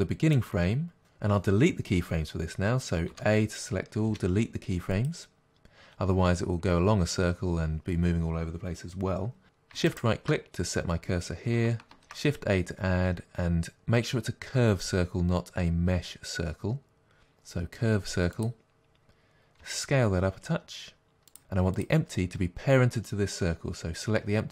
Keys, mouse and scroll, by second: 5.1 Delete, 9.9-11.9 shift+right drag, 19.7 s, 21.4 click, 23.3 click.